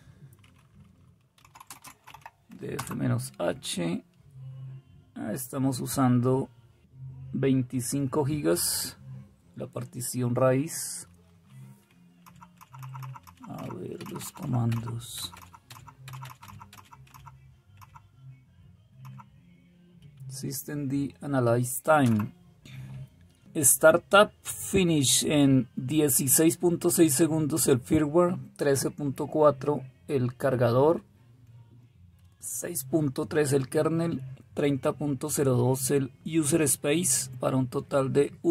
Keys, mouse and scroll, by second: 1.1-2.7 typing, 12.9-13.5 Up, 13.9 Up, 14.1 Up, 14.3 Up, 14.6 Up, 15.1 Up, 16.0 Up, 16.1 Up, 16.7 Up, 17.0-38.5 Up.